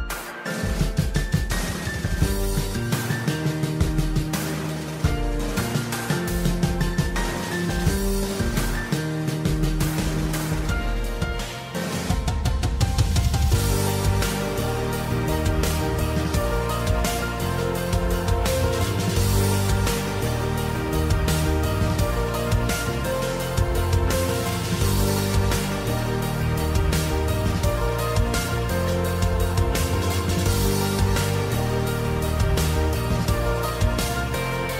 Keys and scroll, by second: 2.5 super+2, 3.1-4.4 typing, 5.7-7.5 typing, 15.5 super+z, 18.7 super+z, 21.4 super+z.